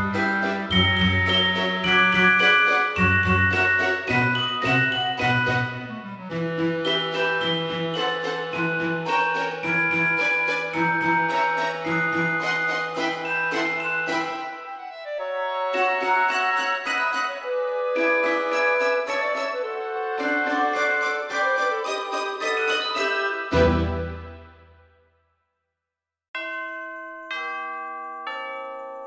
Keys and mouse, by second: 1.0 click, 2.4 click, 5.4 g, 5.6 z, 7.4 click, 8.0 middle click, 10.7 F6, 12.8 KP_7, 14.1 shift+d, 14.9 right click, 15.7 r, 15.9 KP_1, 16.4 KP_8, 17.0 Return, 17.0 KP_Enter, 17.9 click, 18.5 middle click, 20.2 click, 21.6 shift+click, 24.7 click, 25.9 shift+middle click, 27.7 click, 28.1 Tab.